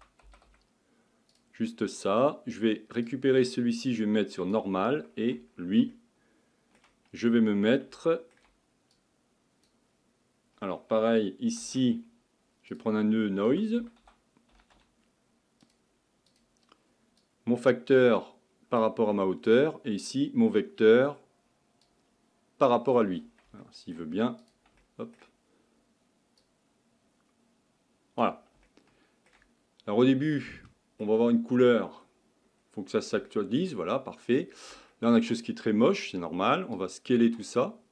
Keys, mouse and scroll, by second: 3.0-6.6 drag, 6.6-8.9 shift+middle drag, 8.9-15.7 drag, 17.2-19.1 drag, 19.1-23.2 middle drag, 23.2 click, 29.8-32.6 scroll up 6, 32.6-33.3 scroll down 3, 33.3-33.8 shift+middle drag, 33.8-34.3 scroll up 4, 34.3-36.9 scroll down 4, 36.9-37.9 drag.